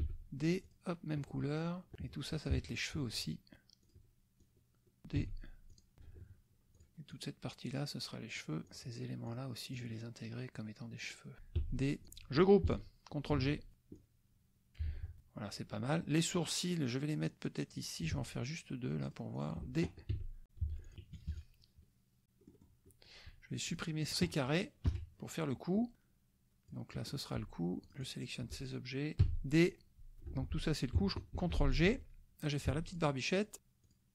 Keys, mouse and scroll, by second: 0.0 d, 0.6 click, 1.3 click, 2.5 shift+KP_Subtract, 3.8 shift+click, 4.4-5.0 shift+drag, 5.3 d, 5.7 click, 6.7 shift+click, 7.1-8.6 shift+drag, 8.8 shift+click, 9.3 shift+click, 9.7 shift+click, 11.2 shift+click, 11.6 d, 12.0 click, 12.1 F1, 13.5 ctrl+g, 13.7 ctrl+click, 14.0-14.9 ctrl+drag, 14.9 ctrl+z, 15.7-18.0 drag, 18.2 shift+click, 19.0 shift+click, 19.5 shift+drag, 20.1 d, 20.7 F1, 20.9 drag, 21.0 KP_Subtract, 22.5 click, 22.9 click, 23.8 click, 24.0 click, 24.9 Delete, 25.9-26.9 drag, 26.9 click, 27.8 shift+click, 28.0 shift+click, 29.2 d, 29.6 click, 30.3 F1, 31.4 ctrl+g, 31.9 ctrl+drag, 32.6 shift+click, 33.0 shift+click, 33.3 shift+click, 33.8 shift+click.